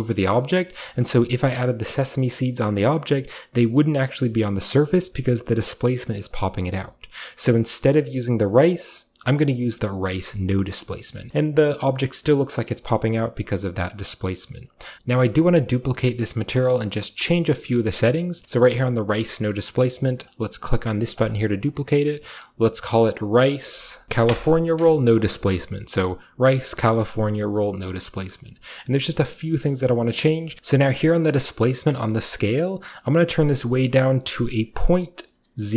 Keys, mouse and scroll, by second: 1.2-2.2 shift+scroll up 2, 2.2-5.0 shift+scroll up 1, 5.0-6.3 shift+scroll up 1, 6.3-7.3 shift+scroll up 1, 7.3 shift+scroll up 1, 7.4 right click, 7.4-8.3 scroll down 1, 8.3 click, 10.3 click, 10.9 middle click, 11.3-11.9 scroll down 1, 12.7-13.9 scroll up 1, 13.9-14.4 scroll up 1, 14.4-16.1 typing, 14.6-17.2 middle drag, 15.6-16.2 scroll down 1, 16.2-17.2 scroll down 1, 17.2 click, 18.4-20.1 scroll down 1, 20.1-21.2 scroll down 1, 21.2 click, 21.7 click, 22.4 click, 23.4 click, 24.0 BackSpace, 24.2 Return, 25.9-28.0 drag, 28.2 middle click, 29.3 middle click, 29.6-32.8 scroll up 1, 29.7-30.1 middle drag, 30.2-32.8 middle drag, 30.6 ctrl+z, 33.4 click, 33.5 click.